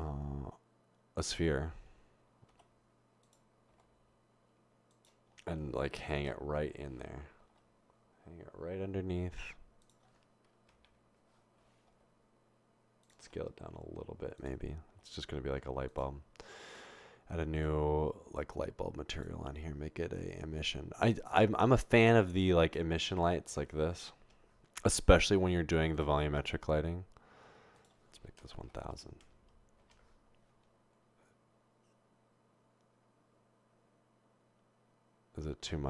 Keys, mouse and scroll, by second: 3.3-4.2 typing, 6.2 typing, 7.4 typing, 10.7 typing, 11.9 typing, 13.2 typing, 14.9 typing, 16.7 click, 17.6 click, 19.2 click, 21.8 click, 24.4 0, 27.8 click, 28.8-29.2 typing, 29.8 Return.